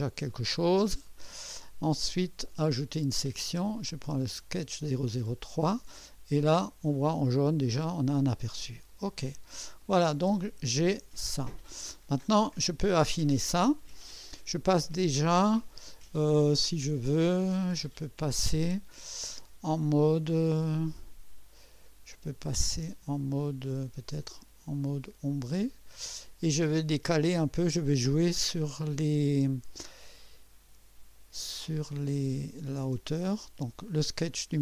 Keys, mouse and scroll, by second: 1.1-1.5 right drag, 2.9 click, 5.1 click, 6.4-8.2 drag, 9.0 click, 9.8-11.7 drag, 12.6 right click, 12.6 click, 17.4-18.6 drag, 21.0-21.6 right drag, 24.4 click, 25.4 click, 27.1 click, 33.6 click.